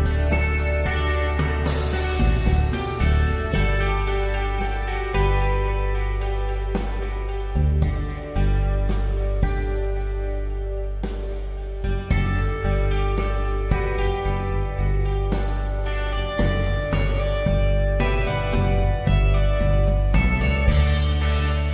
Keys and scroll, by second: 16.3 Down.